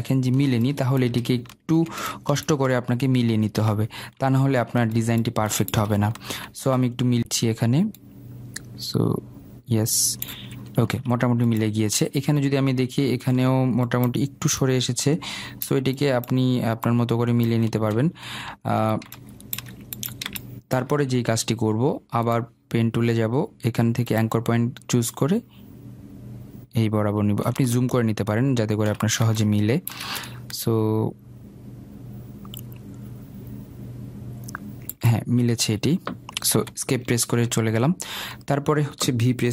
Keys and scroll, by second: 37.1 Escape.